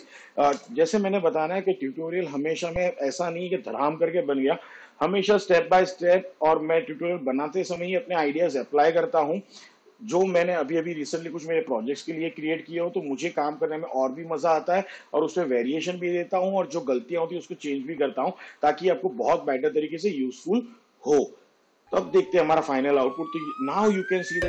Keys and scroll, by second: 1.9 space.